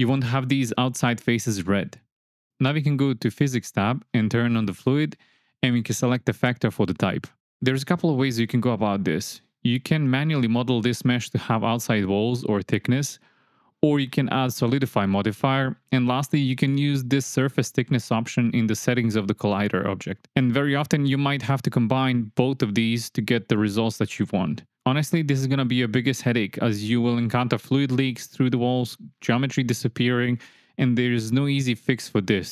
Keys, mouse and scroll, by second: 2.2 Tab, 3.8 click, 5.0 click, 5.8-6.9 drag, 28.2 space.